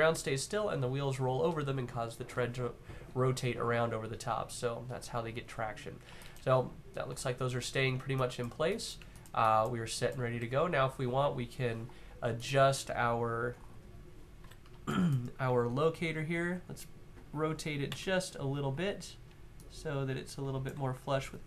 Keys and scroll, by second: 14.1 w, 15.2 w, 17.6 r, 18.0 e, 20.5 w.